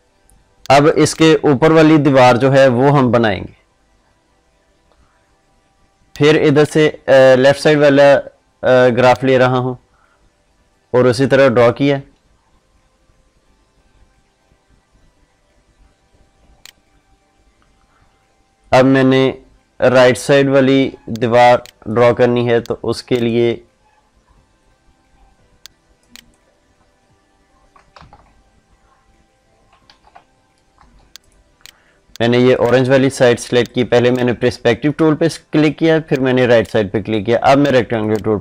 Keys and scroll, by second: 27.9 ctrl+z.